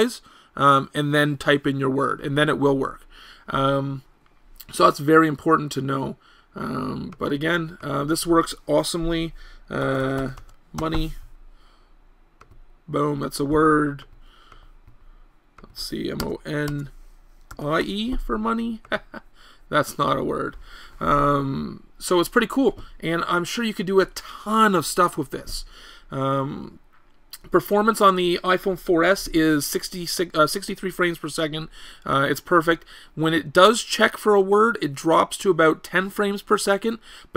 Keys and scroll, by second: 16.2 BackSpace, 16.7 BackSpace.